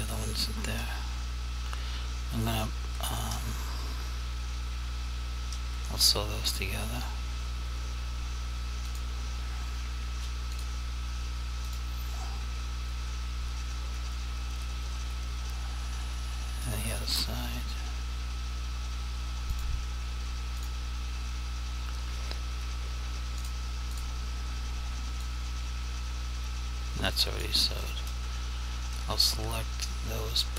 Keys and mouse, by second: 9.0 click, 19.6 click, 23.4 click, 25.4 click.